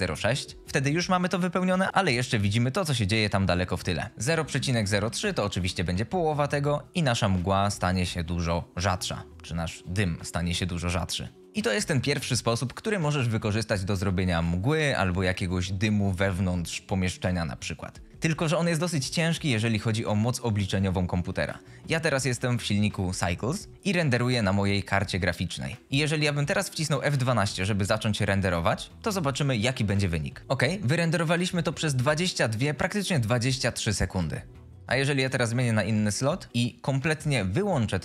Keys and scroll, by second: 0.0 KP_6, 0.1 Return, 4.1 Return, 4.2 KP_0, 4.4 KP_Decimal, 4.5 KP_0, 5.0 KP_3, 5.5 Return, 11.4 Return, 25.8 F12.